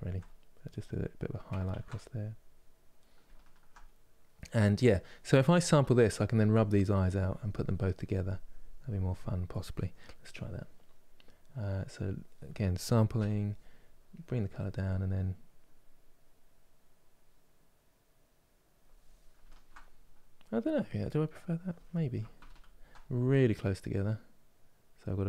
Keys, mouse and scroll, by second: 0.3-1.4 drag, 1.4 ctrl+z, 1.9-3.0 drag, 3.0-5.9 ctrl+middle drag, 5.9-14.0 drag, 15.4-18.3 drag, 19.2-22.2 ctrl+middle drag, 22.2 ctrl+z, 24.7 click.